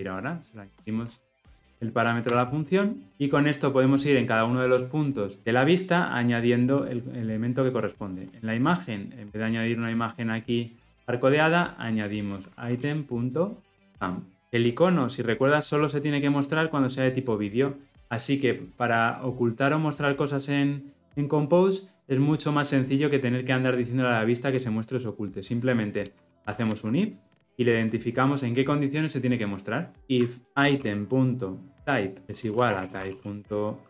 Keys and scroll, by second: 13.9 Return, 32.2 Return.